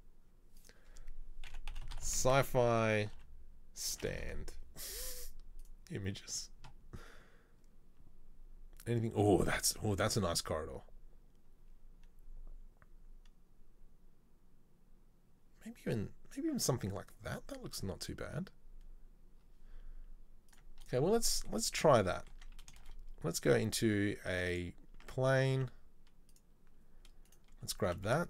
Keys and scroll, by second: 22.6 Tab, 22.9 shift+a, 25.1 Tab, 25.7 s, 27.9 s.